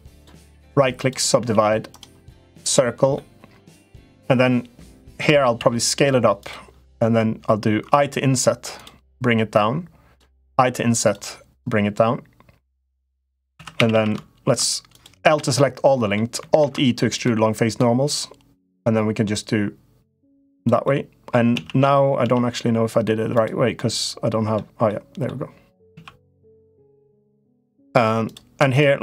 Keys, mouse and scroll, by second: 0.3 right click, 1.2 s, 2.4 click, 3.0 middle click, 5.3 s, 9.3 click, 10.2 i, 11.3-13.2 drag, 13.4 2, 13.5 a, 13.7 a, 14.7 click, 15.0 l, 15.3 middle click, 16.3 alt+e, 20.7 middle click, 21.3 z, 22.0 z, 23.6 middle click, 24.6 middle click, 25.6 z, 27.2 middle click, 27.7 3, 28.7 shift+click.